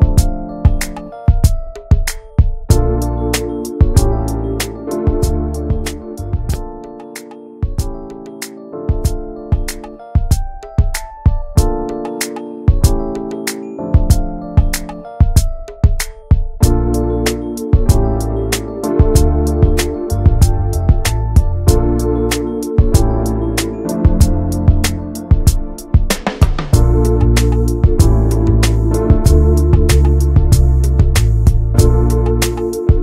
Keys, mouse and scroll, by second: 0.2-0.9 scroll up 2, 0.4 shift+middle click, 0.9 click, 1.7 2, 1.9 click, 3.0 middle click, 3.8 alt+shift+click, 4.4 ctrl+z, 4.9 alt+shift+click, 5.1 middle click, 6.1 alt+shift+click, 6.3 middle click, 7.1 scroll down 1, 7.3 middle click, 8.1 alt+shift+click, 8.4-10.0 middle drag, 10.0 right click, 10.3 a, 11.3 right click, 12.1 Tab, 12.2 scroll down 2, 12.4 middle click, 12.7 ctrl+s, 13.9 click, 14.3 middle click, 14.6 ctrl+s, 15.4 middle click, 15.7 ctrl+s, 15.8 click, 16.3 /, 16.6 scroll down 1, 16.9 middle click, 17.3 click, 18.5 middle click, 18.7 Tab, 19.9 click, 20.7 a, 21.8-22.2 scroll down 1, 22.2 Tab, 22.3 click, 22.4 scroll down 1, 22.6 middle click, 23.3 ctrl+s, 23.4 middle click, 23.7 ctrl+s, 23.9 shift+middle click, 24.4 ctrl+s, 24.6 shift+middle click, 25.0 ctrl+s, 25.1 click, 25.6 Tab, 26.1 shift+middle click, 27.0 scroll up 1, 27.2-28.7 shift+middle drag, 28.7 s, 29.9 scroll down 2, 30.0 s, 30.9 Tab, 30.9 click, 31.1 scroll down 2, 31.3 middle click, 31.6 ctrl+s, 31.8 click, 32.0 shift+middle click, 32.1 scroll up 1, 32.4 ctrl+s, 32.9 click.